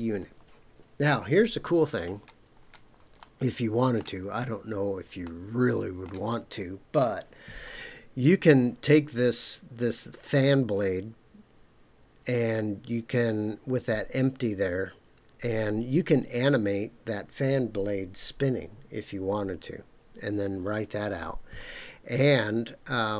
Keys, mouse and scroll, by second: 2.0-2.9 shift+scroll up 6, 3.2-4.0 shift+middle drag, 4.4-5.0 scroll up 2, 5.2-6.1 shift+middle drag, 22.5-23.0 scroll down 2.